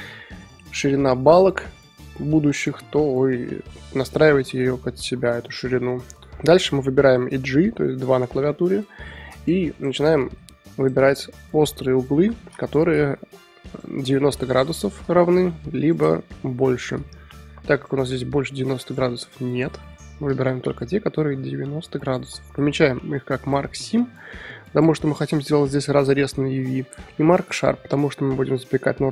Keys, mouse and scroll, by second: 0.3-3.4 middle drag, 4.0-5.5 middle drag, 5.5 2, 8.5 click, 9.3 alt+shift+click, 9.7 alt+shift+click, 10.0 middle click, 10.7 shift+click, 11.2 middle click, 11.9 shift+click, 12.3 ctrl+z, 12.6 shift+click, 13.0 middle click, 13.7 shift+click, 14.1 middle click, 14.8 shift+click, 15.1 middle click, 15.8 shift+click, 16.1 middle click, 16.7 shift+click, 17.0 middle click, 17.7 shift+click, 18.1 middle click, 18.8 shift+click, 19.5 shift+click, 19.8-22.8 middle drag, 23.4-25.0 right drag, 25.0-26.7 middle drag, 26.7-29.1 right drag.